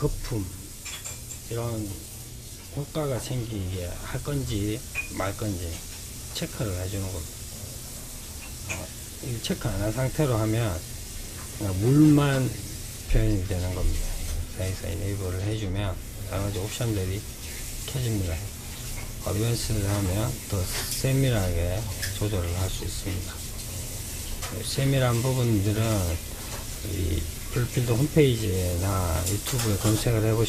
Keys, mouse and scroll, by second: 13.9 click, 14.6-15.6 scroll down 2, 16.3-17.8 scroll down 3, 17.8 click, 19.1-20.4 scroll down 1, 20.4-20.9 scroll down 2, 21.7-25.1 scroll up 4.